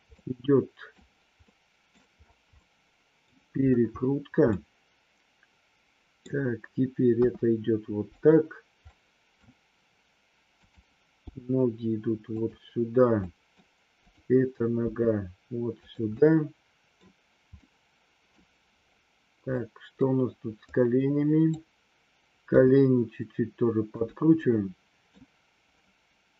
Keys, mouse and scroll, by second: 0.1-0.9 middle drag, 1.4-1.8 middle drag, 2.6 middle click, 4.6-6.2 middle drag, 7.2 r, 8.1 click, 8.8-9.4 middle drag, 10.6 click, 11.1 g, 12.2 click, 13.2 scroll up 1, 13.3 middle click, 14.8 g, 15.7 click, 16.2 scroll up 1, 16.3-16.9 middle drag, 17.6-18.3 middle drag, 19.6-19.9 middle drag, 20.8-21.4 drag, 22.4 g, 24.4-24.9 middle drag, 24.9 scroll down 1.